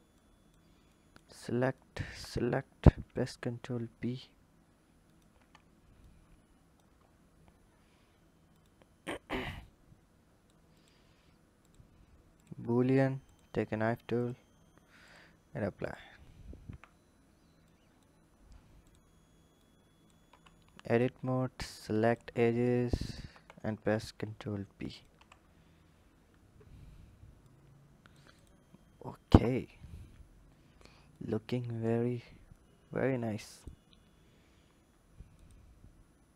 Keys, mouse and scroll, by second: 0.7 click, 1.6 click, 5.8 click, 8.3 click, 9.2 click, 10.5 click, 11.4-13.1 drag, 14.8-15.7 drag, 16.5 h, 17.4 click, 18.2-18.7 scroll up 3, 18.7 click, 19.4 click, 20.1 Tab, 20.7 click, 21.5 click, 22.8 shift+click, 23.6 ctrl+b, 24.9 Tab, 25.2-27.2 scroll down 10, 27.2 click, 28.1 click, 28.9 KP_1, 29.7-30.9 scroll up 2, 30.9-33.9 drag, 35.1 click.